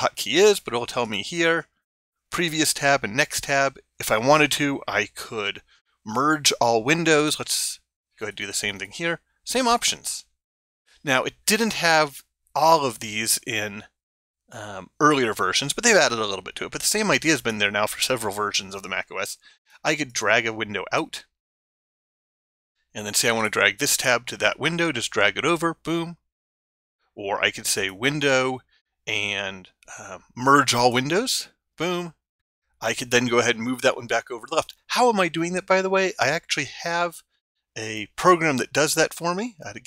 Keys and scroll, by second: 8.2 ctrl+Tab.